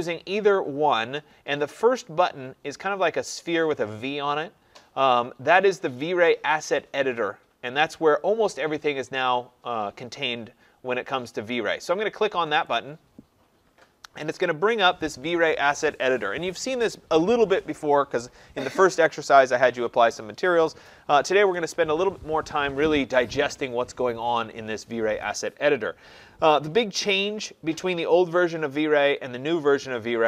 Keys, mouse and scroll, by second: 12.7 click, 14.7 click.